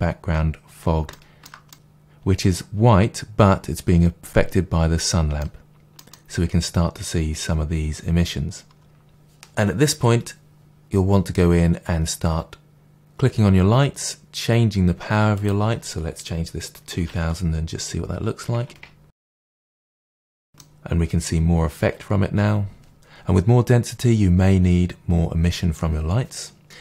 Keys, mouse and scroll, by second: 12.7 click, 15.3-20.4 drag, 17.2 0, 19.9 Return, 20.4-26.8 middle drag.